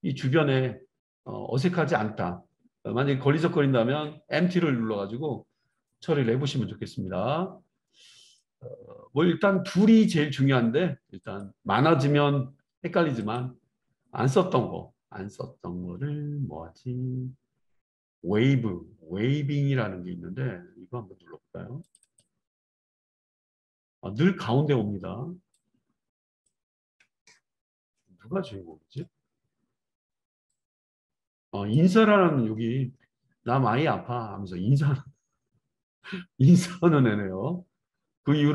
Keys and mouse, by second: 22.2-25.5 middle drag, 25.5-38.5 drag.